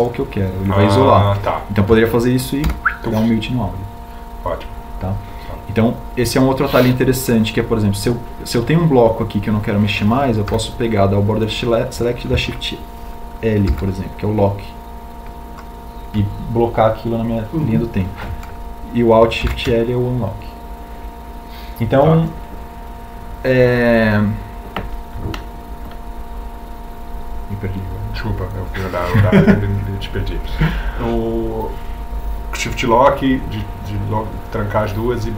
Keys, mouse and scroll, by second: 0.7 ctrl+click, 4.9 h, 12.7 b, 15.7 shift+l, 21.6 alt+shift+l.